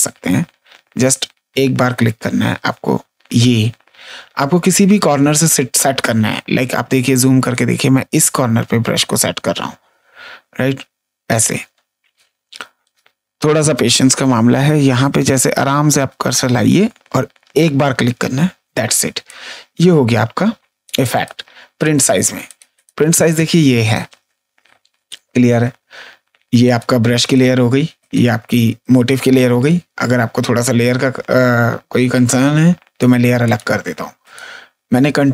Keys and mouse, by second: 6.0 space, 6.5 ctrl+space, 6.9 click, 11.7 space, 12.1 click, 17.5 click, 18.7 space, 19.2 click, 20.8 ctrl+space, 21.0 right click, 21.7 click, 22.4 click, 22.7 click, 23.3 click, 26.6 click, 32.9 click.